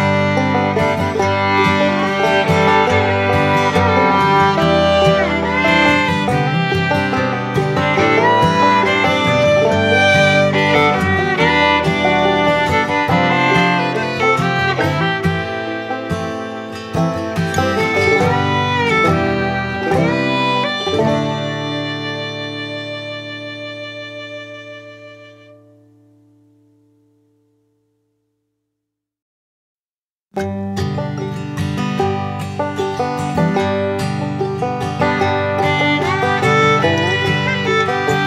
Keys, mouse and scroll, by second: 2.3 click, 5.7-6.4 typing, 13.9-14.7 typing, 14.8 click, 17.2-21.5 drag, 26.1-35.8 drag, 35.8 shift+click.